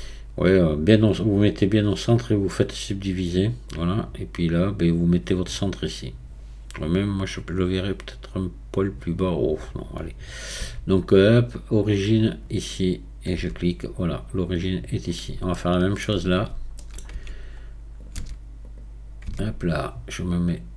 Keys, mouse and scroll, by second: 2.3-3.7 right drag, 3.7 click, 4.5 click, 10.6 q, 12.7 click, 13.4 Tab, 14.5 scroll down 2, 15.5-16.3 shift+middle drag, 16.3-16.7 scroll up 2, 16.8 shift+middle click, 17.1 Tab, 17.6 scroll up 2, 18.0 click, 18.1 Tab, 18.7 click, 19.3 Tab, 19.7 scroll up 2.